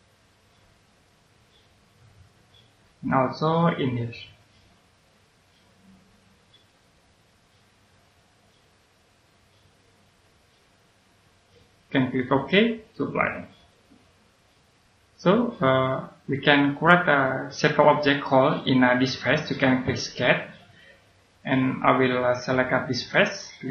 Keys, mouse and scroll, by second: 2.1-2.8 scroll down 1, 2.8 right click, 4.4-6.2 scroll up 1, 6.6 click, 7.2-8.0 scroll up 1, 8.0 click, 11.2 scroll down 1, 11.8 middle click, 13.5 click, 14.2-14.7 scroll down 1, 14.7 right click, 18.2-19.0 scroll up 1, 20.5 click.